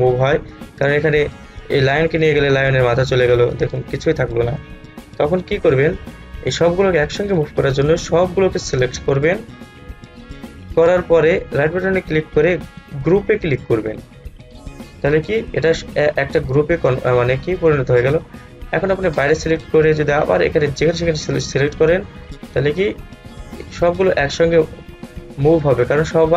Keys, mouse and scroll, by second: 0.3-5.4 drag, 5.7 ctrl+z, 7.4-11.7 drag, 11.7 right click, 14.3 click, 19.3-26.3 drag.